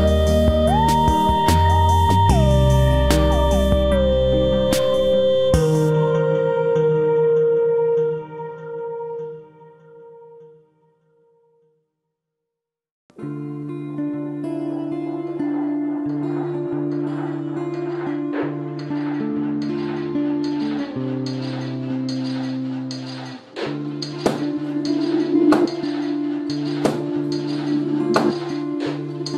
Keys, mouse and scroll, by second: 3.6-5.5 right drag, 4.1 z, 4.4-5.6 middle drag, 5.6-7.1 drag, 5.6 right click, 7.0 KP_3, 7.1 Tab, 8.1 ctrl+s, 9.0 z, 10.4 Tab, 14.4 middle click, 15.8 c, 16.2-18.0 drag, 16.6 ctrl+r, 18.3 ctrl+Tab, 19.2-21.1 right drag, 20.2 c, 24.0 right click, 25.6 c.